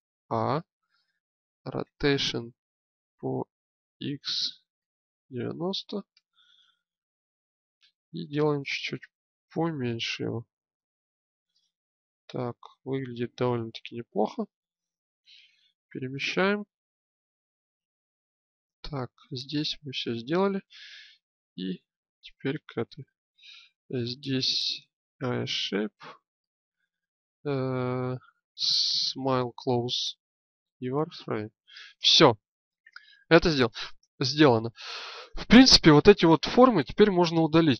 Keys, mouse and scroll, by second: 0.2 a, 1.8 r, 8.1 s, 13.6 Tab, 14.4-16.4 drag, 18.4-19.8 right drag, 19.8-21.2 drag, 21.2-22.9 right drag.